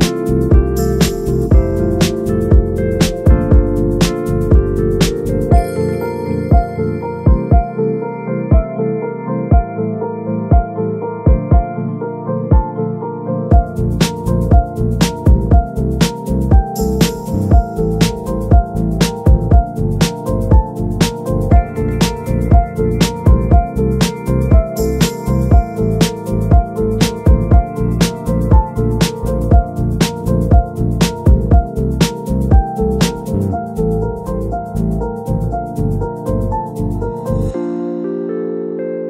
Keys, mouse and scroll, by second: 12.1 scroll down 6, 12.3-12.6 scroll up 3, 12.6 scroll down 2, 13.1-15.8 middle drag, 18.0-19.5 drag, 19.5-19.8 middle drag, 19.8-20.2 scroll down 1, 20.2-22.3 middle drag, 22.3 click, 27.0 shift+right click, 27.4 g, 36.0-39.0 drag.